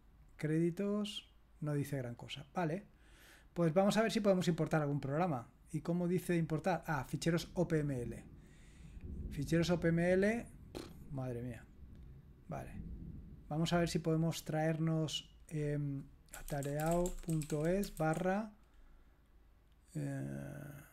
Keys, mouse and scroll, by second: 0.2 click, 1.1 click, 1.9 click, 2.7 click, 4.6 click, 8.5 click, 10.0-11.1 drag, 14.6 click, 16.1-18.5 typing.